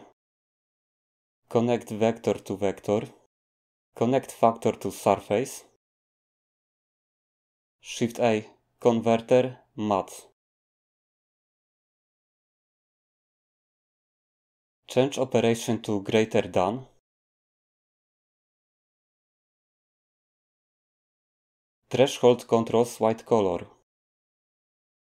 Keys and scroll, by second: 8.0 a.